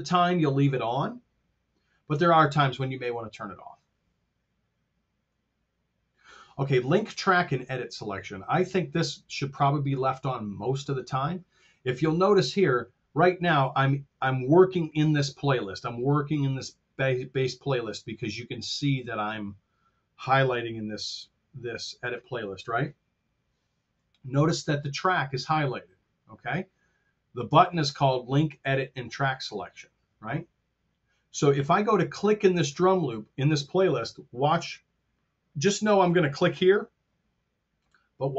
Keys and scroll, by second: 14.8 F7.